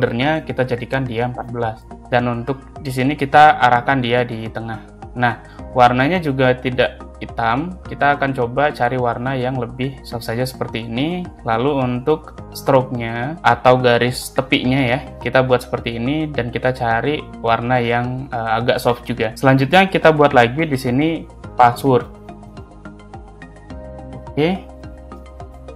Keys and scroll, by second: 1.0 1, 1.2 4, 20.1 ctrl+c, 20.3 ctrl+v, 22.0 shift+p, 23.2 s, 23.2 w, 23.8 a, 24.0 r, 25.4 ctrl+Left.